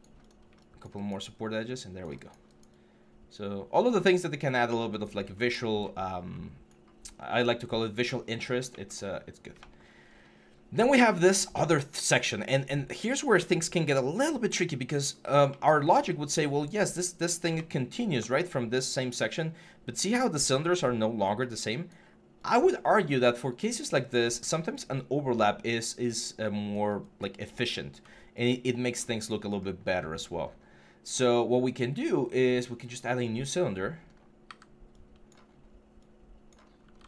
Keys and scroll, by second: 34.2 w.